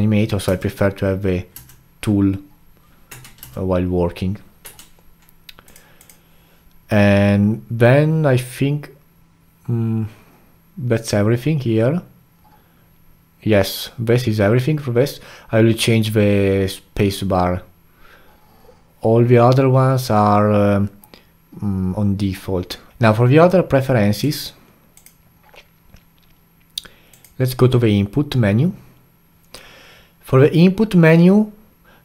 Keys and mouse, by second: 0.5 space, 1.5 space, 3.1 Tab, 3.4 space, 4.6 Tab.